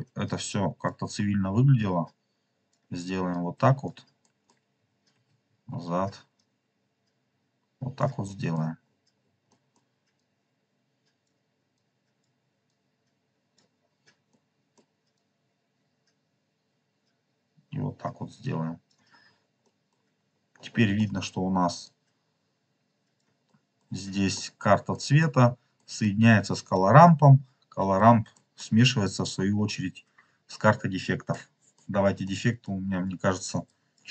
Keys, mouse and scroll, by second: 0.2 click, 1.7 click, 3.2 alt+click, 4.2 middle click, 4.8 ctrl+click, 5.1 ctrl+z, 5.5 scroll up 2, 8.2 middle click, 8.8-9.3 scroll down 4, 9.4 middle click, 10.1-11.2 drag, 11.7-12.2 drag, 12.6-13.5 drag, 14.3 middle click, 15.1 click, 18.8-19.5 scroll up 4, 19.5 middle click, 20.0-20.8 scroll up 3, 20.8 middle click, 21.1 click, 21.8 click, 22.6 click, 23.4 middle click, 24.2 middle click, 24.8 middle click, 25.7 middle click, 27.6-28.3 scroll up 4, 28.2 middle click, 31.2 middle click, 32.3 middle click, 33.5-34.0 drag.